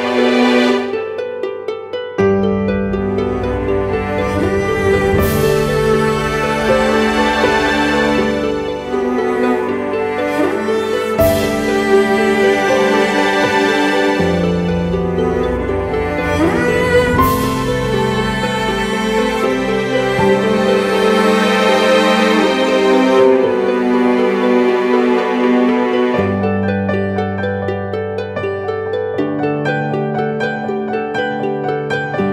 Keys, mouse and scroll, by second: 0.9 typing, 2.8 double click, 11.4 alt+click, 15.3-16.6 typing, 27.3 double click.